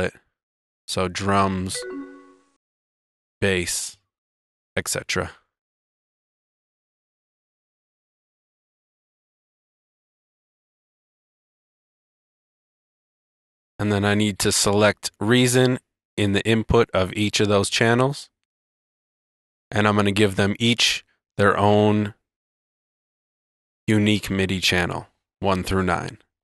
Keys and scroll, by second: 2.5 space, 2.9 Tab, 4.1-7.5 typing, 4.3 Tab, 4.7 Tab, 5.4 Tab, 5.9 Tab, 6.5 Tab, 6.8 Tab, 9.4 Return, 12.3 Return.